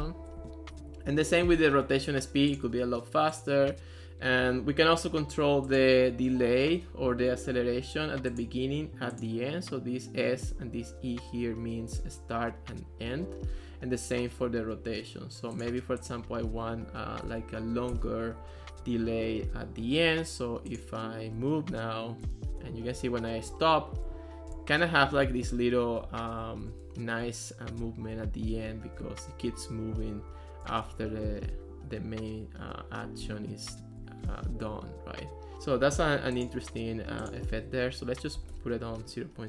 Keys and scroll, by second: 0.2 Return, 17.3 2, 17.9 Return, 21.4 w, 22.3 a, 23.0 w, 24.2 a, 24.5 s, 25.9-27.2 typing, 28.7 d, 29.0 w, 30.1-31.4 typing, 33.7 a, 34.6 w, 38.1-39.0 typing.